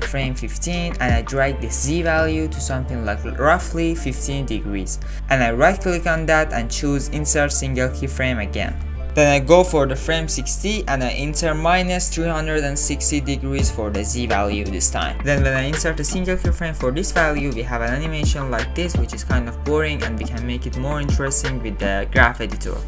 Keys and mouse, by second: 1.2-5.0 drag, 5.4-6.6 drag, 9.9 click, 11.1-16.3 drag, 17.4 shift+Left, 17.9 click, 18.3 space, 21.0 space.